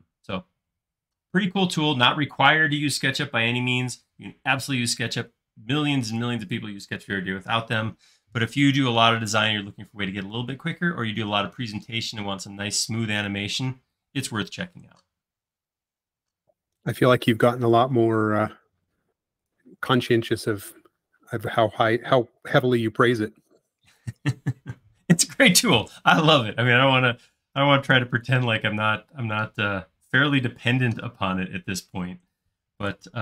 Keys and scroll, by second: 29.2 q, 33.0 Right.